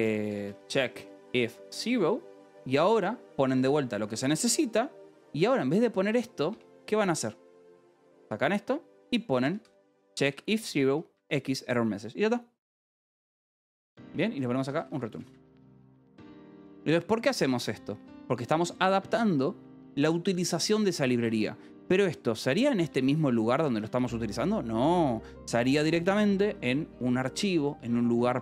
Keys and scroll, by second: 0.0-2.1 typing, 3.9 ctrl+g, 5.3-8.0 typing, 9.2-11.3 typing, 11.1 Escape, 13.1-15.3 typing, 16.1 ctrl+s, 17.7-19.4 typing, 21.4 Escape, 23.3 shift+g, 25.8 l.